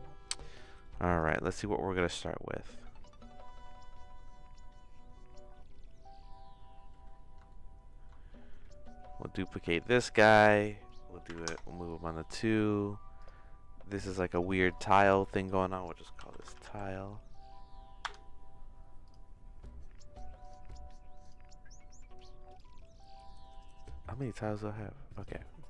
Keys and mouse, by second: 7.4 shift+middle click, 8.6 middle click, 9.5 shift+d, 13.9 click, 14.1-18.7 drag, 22.5 click.